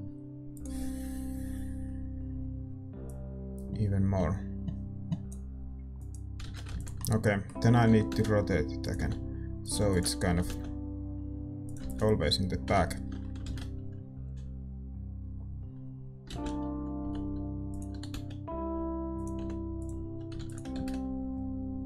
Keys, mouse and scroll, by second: 0.5 shift+z, 0.8-7.9 drag, 6.5 shift+z, 6.9 ctrl+s, 7.9-10.3 middle drag, 7.9 r, 8.9 g, 10.3 r, 12.6 ctrl+s, 12.6 KP_0, 14.8 middle click, 14.8 shift+z, 17.0 shift+z, 17.0 g, 17.9 r, 19.3 g.